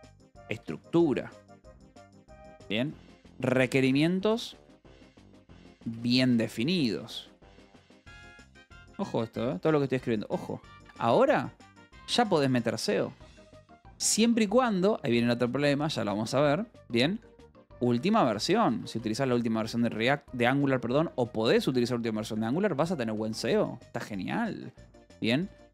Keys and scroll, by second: 0.0-8.2 typing, 10.1 space, 10.7 BackSpace, 11.0 =, 11.2 space, 13.5 shift+s, 13.7 space, 17.1-19.8 typing, 25.6-25.7 typing.